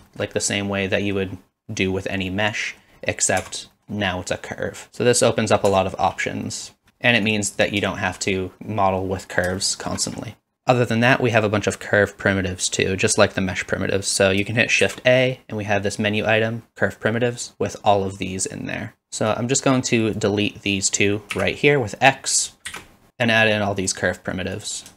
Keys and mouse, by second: 0.1 shift+middle click, 0.4 middle click, 2.3 middle click, 3.4 Tab, 3.8 middle click, 4.9 ctrl+z, 5.7 Tab, 6.5 middle click, 7.9 shift+middle drag, 9.6-9.9 shift+middle drag, 10.5 shift+a, 14.8 shift+a, 19.3 click, 22.7-24.6 typing, 23.5 click, 24.2 click, 24.6 click, 24.8 click.